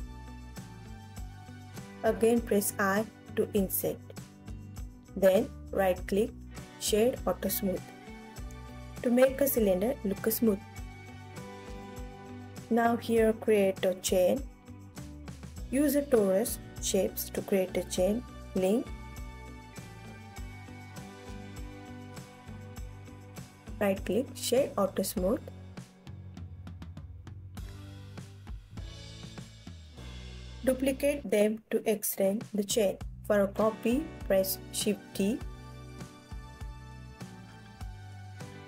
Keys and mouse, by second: 2.7 click, 3.4 u, 5.0 i, 6.1 click, 6.6 e, 7.6 click, 8.0 Tab, 9.0 ctrl+s, 9.7 click, 10.0-11.2 drag, 12.0 click, 12.7 ctrl+s, 13.9 KP_7, 15.7 click, 16.2 ctrl+s, 17.7 shift+click, 18.6 shift+a, 21.0 s, 22.9 click, 23.5 alt+drag, 23.5-23.8 alt+middle drag, 23.8 ctrl+s, 25.2 alt+middle click, 25.3-25.9 alt+drag, 26.6 ctrl+s, 26.9 KP_1, 29.2 ctrl+s, 30.0 click, 30.8 shift+d, 31.5 click, 32.5 KP_3, 33.4 r, 34.7 click, 35.0 g, 35.8 click, 36.3 s, 37.1 click, 37.4-38.2 alt+middle drag, 38.5 KP_1.